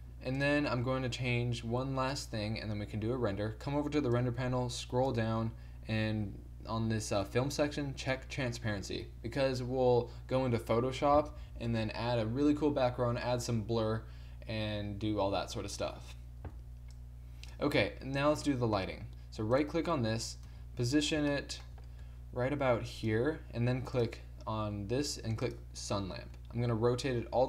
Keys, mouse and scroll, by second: 0.0-16.2 drag, 16.9 click, 18.2 middle click, 20.4 KP_7, 22.0 g, 26.3 r.